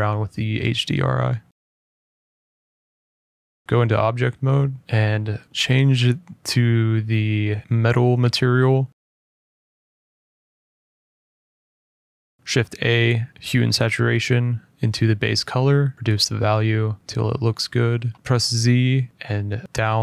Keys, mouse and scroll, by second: 3.6 middle click, 3.6 click, 3.9 click, 5.9 middle click, 6.0 middle click, 6.0 middle click, 6.1 ctrl+z, 6.1 middle click, 6.4 click, 7.2-8.3 scroll up 8, 8.3-8.9 scroll up 2, 9.7 click, 11.0 middle click, 11.2-11.6 scroll down 3, 12.0 middle click, 12.3 click, 12.3 a, 13.6 click, 14.6 typing, 14.9 click, 15.8 click, 16.8 click, 17.6 click, 17.9 click, 18.1 click, 18.1 z, 18.2 z, 18.2 z, 18.4 click, 18.4 z, 19.0 middle click, 19.5 middle click, 19.7-20.0 scroll down 2.